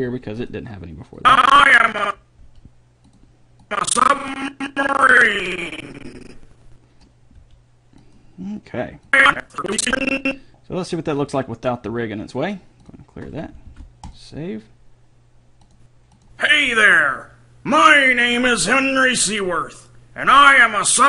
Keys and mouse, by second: 0.1 g, 2.6 g, 7.6 g, 9.3-11.1 drag, 13.1 click, 13.9 ctrl+s.